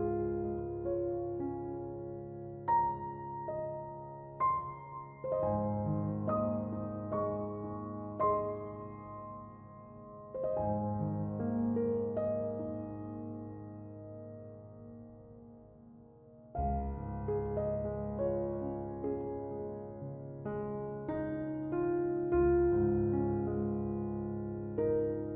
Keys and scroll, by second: 5.6 Escape, 21.1 8, 21.5 Return, 23.6 f.